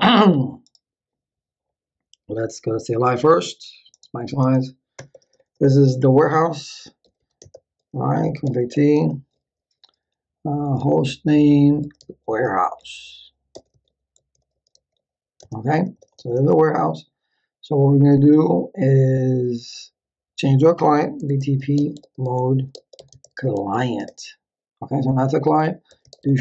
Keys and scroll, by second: 5.0 Return, 6.8-9.4 typing, 10.8-15.4 typing, 11.0 Tab, 20.9-24.2 typing, 25.6-26.4 typing.